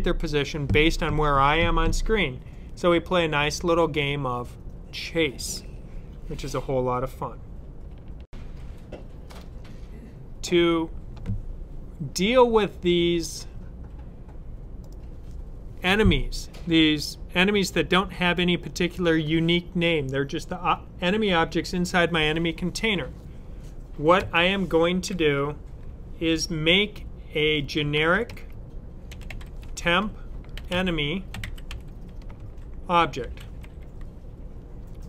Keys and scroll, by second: 27.6-34.0 typing.